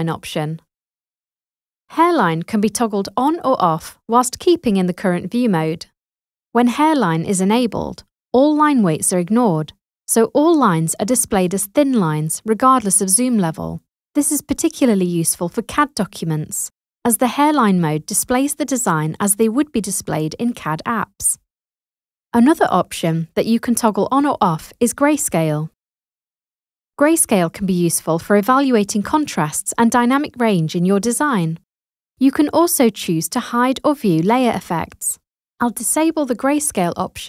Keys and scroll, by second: 21.7 super+0.